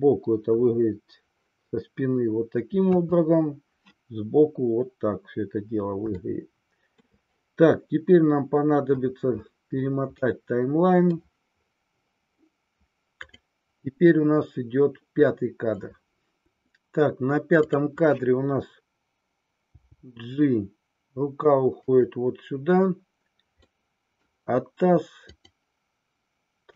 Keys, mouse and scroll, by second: 2.9 KP_3, 6.1-7.1 shift+middle drag, 10.3 middle click, 13.2 click, 17.6-18.8 drag, 19.7 g, 23.6 scroll up 1, 23.9-24.3 middle drag, 25.1 click.